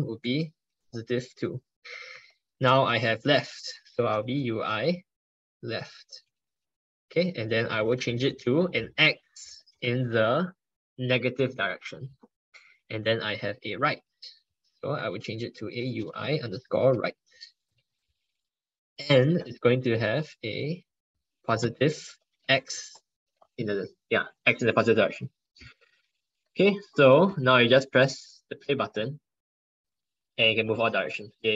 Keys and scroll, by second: 2.1 ctrl+Right, 2.2 ctrl+Right, 3.2 ctrl+BackSpace, 12.7 ctrl+Right, 12.8 ctrl+Right, 13.0 ctrl+Right, 15.0 ctrl+BackSpace, 19.2 ctrl+Right, 19.4 ctrl+Right, 19.6 ctrl+Right, 19.8 ctrl+Right, 20.2 ctrl+Left, 21.5 ctrl+Left.